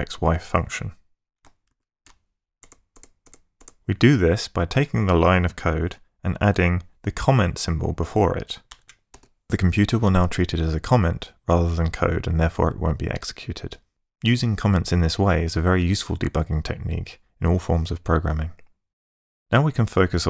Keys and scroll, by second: 2.6 ctrl+shift+Tab, 7.2 i, 8.7 Down, 8.7 Left.